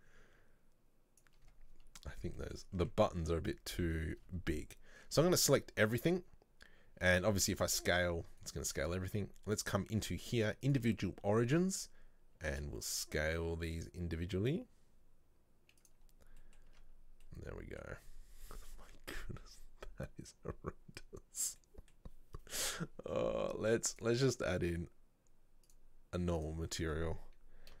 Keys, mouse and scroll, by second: 2.1-2.5 scroll down 2, 2.5 middle click, 2.8 Tab, 3.9 a, 9.7-12.5 drag, 12.5 s, 16.5 middle click, 16.8 Tab, 17.1 scroll down 1, 17.4-18.4 middle drag, 18.4-18.8 scroll up 1, 21.7-24.0 middle drag, 24.0 click, 25.8 click, 26.5-27.8 drag.